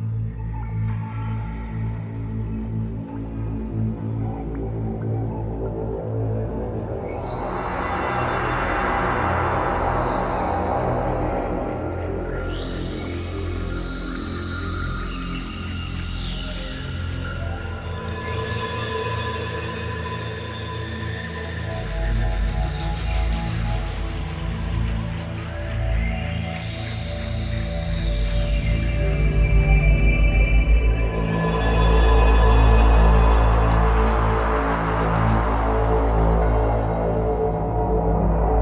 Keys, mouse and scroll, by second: 5.3 right click, 6.3 shift+right click, 8.4 shift+right click, 8.8 KP_3, 11.1 z, 13.6 s, 19.7 click, 21.3 right click, 22.7 shift+right click, 24.1 s, 26.3 click, 27.2 middle click, 31.2 z, 32.9 click, 34.7 middle click, 36.5 shift+middle click, 37.9-38.3 scroll down 2.